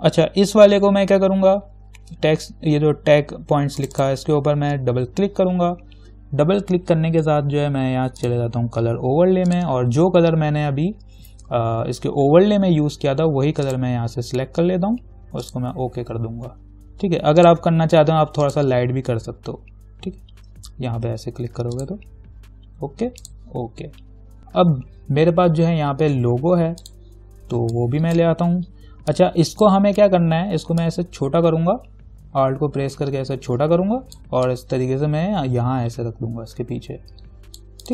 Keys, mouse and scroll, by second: 0.0-1.8 scroll down 1, 4.0 click, 8.4 click, 13.9 click, 22.0 click, 31.0-37.9 alt+drag.